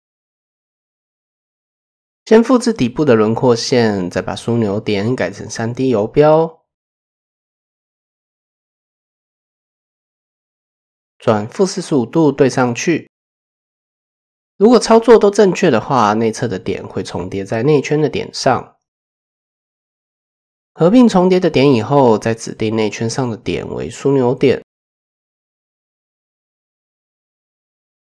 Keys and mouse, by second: 1.3 shift+d, 2.8-3.9 drag, 4.5 shift+click, 5.8 r, 7.9-9.3 drag, 10.7-12.2 drag, 13.6 shift+click, 15.5 a, 16.5 m, 18.3 shift+click, 19.2-19.6 drag, 19.8 drag, 22.5 click, 24.4 shift+click, 25.3 KP_1, 26.5 shift+click, 27.2 shift+middle click.